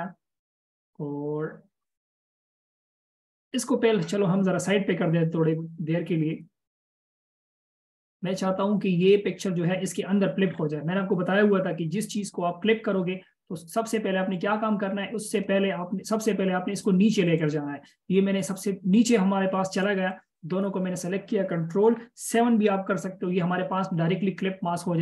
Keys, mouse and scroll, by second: 7.8 double click, 10.8-11.2 scroll down 1, 20.4 double click.